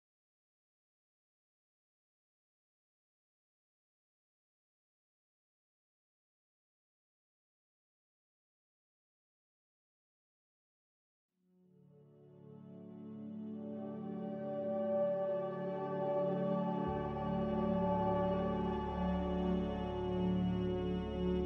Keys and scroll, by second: 7.4 z, 13.3-14.5 typing, 15.4 Return, 16.5 z.